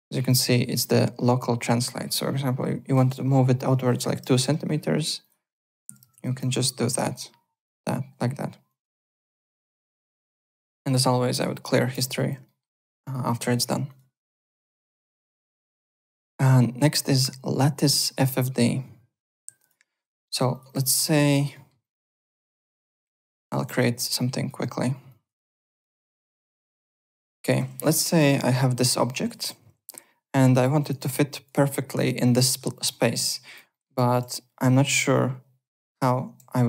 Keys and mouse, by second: 0.2 click, 1.8 click, 4.1 KP_2, 4.2 Return, 4.2 KP_Enter, 5.2 click, 5.6 KP_0, 5.8 KP_Decimal, 6.0 KP_0, 6.1 KP_2, 6.4 Return, 6.4 KP_Enter, 7.1 click, 8.6 alt+click, 8.9 w, 10.1 click, 10.3 `, 10.5 click, 11.9 ctrl+h, 12.4 alt+middle click, 12.7 alt+right click, 12.9 alt+click, 13.3 alt+Tab, 13.8 alt+click, 17.0 click, 19.3 click, 19.5 alt+click, 19.8-20.8 typing, 20.5 click, 21.0 alt+middle click, 21.2 alt+right click, 21.5 alt+middle click, 21.8 alt+click, 22.8 alt+middle click, 23.2 click, 23.5 ctrl+d, 23.6 w, 24.1 click, 24.6 alt+middle click, 25.0 alt+click, 25.5-26.6 typing, 26.1 click, 26.3 alt+click, 26.8 click, 27.3 alt+click, 27.7 3, 27.8 click, 28.1 alt+middle click, 28.7 click, 29.9 f, 30.5 click, 30.5 f, 30.9 v, 31.0 click, 32.9 alt+middle click, 33.1 alt+right click, 33.4-35.8 typing, 33.7 alt+middle click, 33.9 alt+click, 34.8 click, 35.7 click.